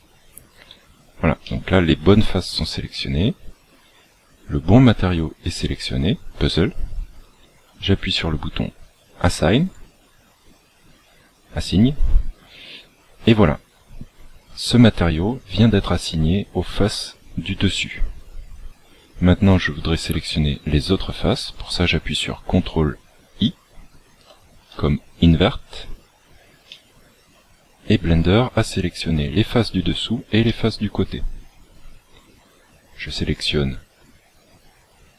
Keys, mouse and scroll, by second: 9.5 click, 26.6 middle click, 30.3 middle click, 33.2 click.